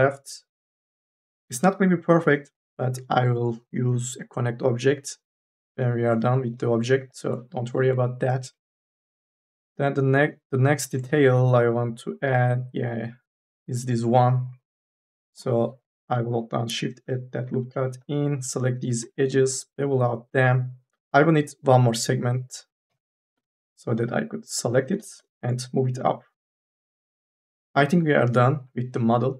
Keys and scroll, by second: 15.2 k, 15.6 l, 17.1 e, 17.4 2, 18.8 m, 19.2 s, 23.4 2, 23.6 e.